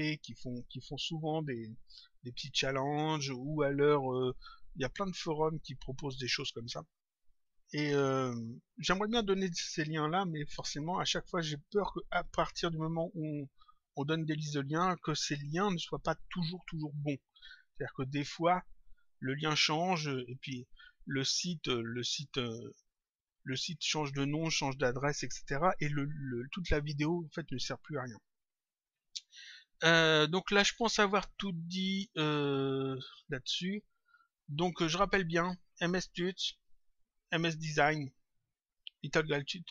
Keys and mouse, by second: 21.9 click, 28.7 click, 32.4 click, 34.9 click, 36.7 click, 38.7 click.